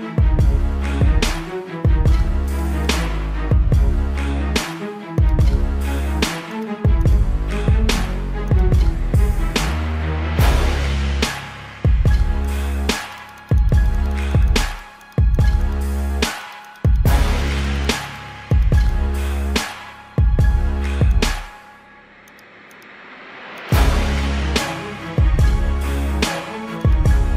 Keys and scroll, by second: 1.2 ctrl+alt+z, 1.4 ctrl+=, 1.8 ctrl+=, 3.1 ctrl+=, 3.5 space, 3.8 ctrl+=, 6.3 ctrl+alt+z, 6.8 space, 10.5 ctrl+alt+z, 11.6 space, 12.5 space, 13.8 space, 14.1 space, 17.0 ctrl+=, 17.9 ctrl+=, 18.5 space, 18.7 space, 22.1 ctrl+alt+z, 23.2 space, 24.6 ctrl+alt+z, 26.6 ctrl+alt+z.